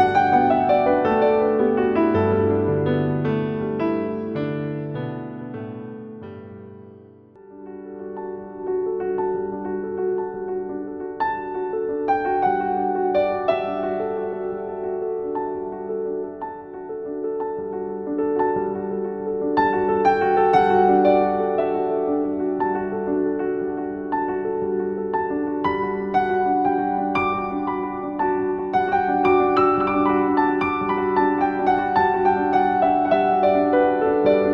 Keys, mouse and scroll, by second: 3.7 right click, 6.0-6.7 typing, 8.1 click, 12.0 typing, 14.4 typing, 16.5 click, 17.0 click, 18.7-26.3 typing, 19.2 click, 19.7 click, 20.0 click, 21.8 click, 22.9 click, 25.5 click, 25.8 click, 26.1 click, 26.5 click, 26.6 click, 27.7 click, 28.1-28.5 scroll up 1, 28.9-32.9 typing, 29.1 click, 29.4 click, 29.8 click, 30.4 click, 30.7 click, 32.8 click.